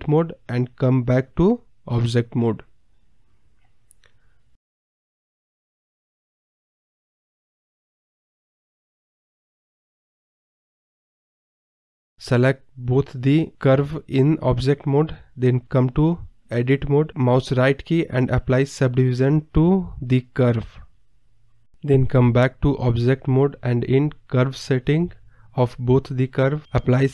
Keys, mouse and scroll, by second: 0.0 e, 0.5-1.0 middle drag, 1.0 g, 1.5 r, 1.9-3.3 middle drag, 3.3 g, 4.1 e, 4.5 middle click, 5.0 r, 5.6-6.0 middle drag, 6.0 e, 6.6 middle click, 7.0 ctrl+z, 7.3-11.8 typing, 8.4 middle click, 12.2 scroll down 1, 12.4 middle click, 12.8 Tab, 12.8 scroll down 1, 12.9-13.3 middle drag, 13.3-13.7 scroll up 3, 13.7-14.4 scroll down 4, 13.8 middle drag, 14.4-16.0 scroll up 2, 16.8 shift+click, 17.3 Tab, 18.2 a, 18.7-20.0 right drag, 20.0 click, 21.0 scroll up 1, 21.1 middle drag, 21.4 scroll down 1, 22.4 Tab, 22.7 scroll down 2, 22.8 middle click, 23.2 click, 23.6 click, 24.3 click, 24.8-26.3 drag, 26.9-27.1 drag.